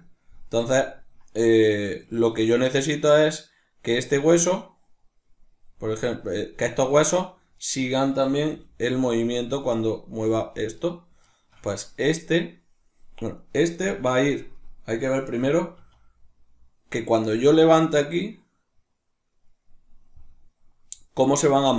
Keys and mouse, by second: 1.7-3.6 shift+middle drag, 3.6 right click, 4.2 right click, 5.6 right click, 6.2 right click, 6.4 right click, 7.2 right click, 8.1 g, 9.4 right click, 9.8 g, 10.5 right click, 11.0-11.5 shift+middle drag, 11.5 right click, 13.0 right click, 13.5-14.2 shift+middle drag, 14.2 right click, 15.4 r.